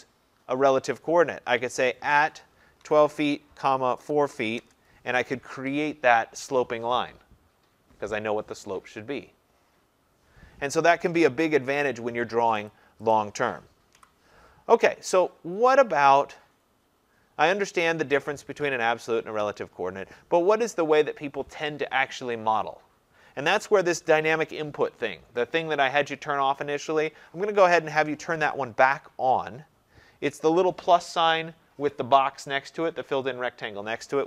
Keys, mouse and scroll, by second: 1.5 click, 2.0-4.9 typing, 11.6 Return, 12.7 click, 13.2 click, 14.0 Delete, 32.9 click.